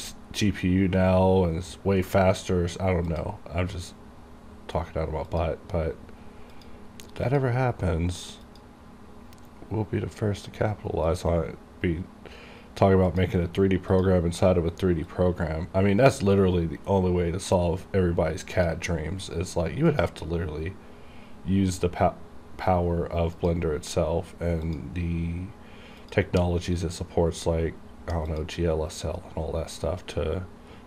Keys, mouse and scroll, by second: 0.2-1.3 scroll down 1, 3.2 click, 5.4 click, 11.2-20.0 drag, 23.5 click, 26.9-28.4 scroll down 1, 28.4 click, 29.1-30.8 scroll down 1.